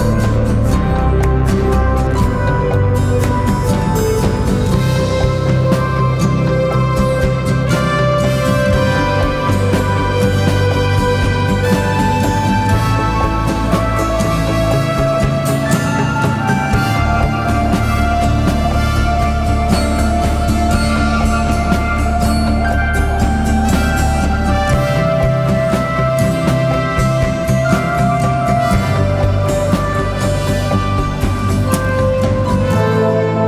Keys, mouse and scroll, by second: 0.0 ctrl+t, 3.5 alt+shift+click, 4.2 alt+shift+i, 6.1 ctrl+t, 7.9 alt+shift+click, 8.6 alt+shift+i, 11.5 Return, 12.5 Down, 27.7 alt+click.